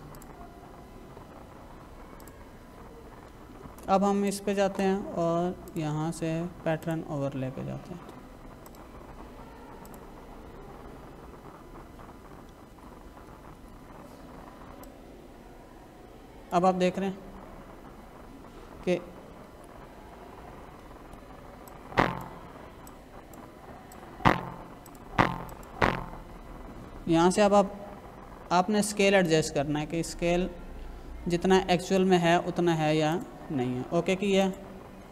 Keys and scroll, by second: 12.7 ctrl+-, 19.4 ctrl+=, 20.6 space.